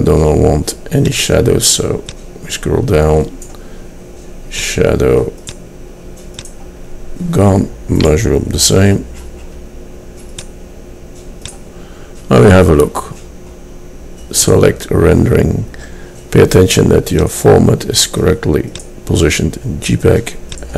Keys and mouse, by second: 7.3-9.7 middle drag, 10.5-13.5 middle drag, 17.3-19.2 drag, 20.6 click.